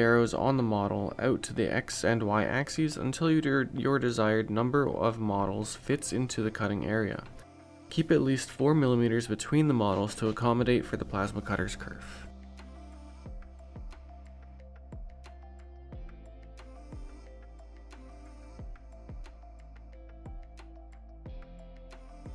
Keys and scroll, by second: 10.6 6, 13.1 6.